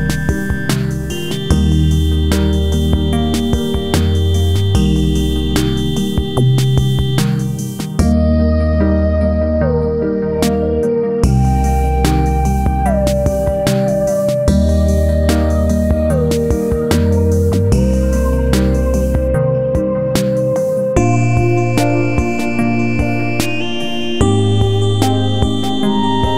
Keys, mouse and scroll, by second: 0.2 click, 1.1 click, 2.9 click, 4.5-7.2 drag, 7.2 click, 8.7-11.5 drag, 11.5-13.4 drag, 13.6 click, 15.8 click, 17.0 scroll up 1, 17.7 F4, 18.0 scroll up 1, 18.4 click, 19.0-19.4 scroll down 1, 22.4 click, 24.0 click, 24.7 click, 25.3 ctrl+z, 25.8 F4, 26.1 click.